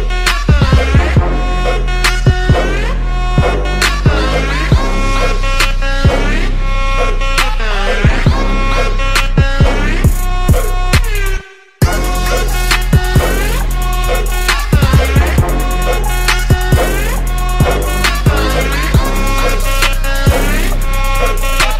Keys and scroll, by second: 0.8 ctrl+z, 4.7 ctrl+z, 7.0 ctrl+z, 8.0 ctrl+z, 8.5 space, 8.5 ctrl+z, 10.2 ctrl+z, 10.5 ctrl+z, 13.0 space, 14.6 ctrl+z, 15.1 ctrl+z, 18.4 ctrl+z.